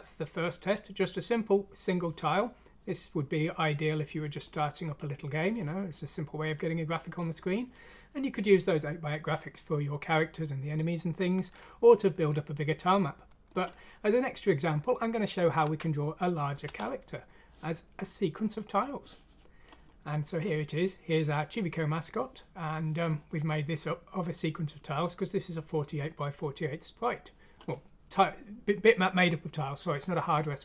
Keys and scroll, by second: 15.6 F6, 16.6 Return.